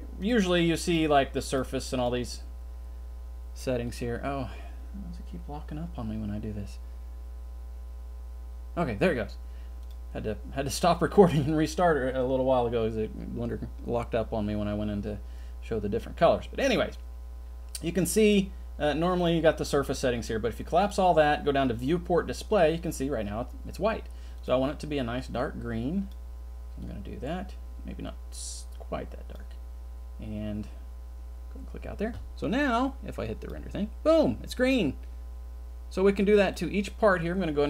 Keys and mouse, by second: 9.9 click, 20.8 click, 33.4 drag, 36.4 click.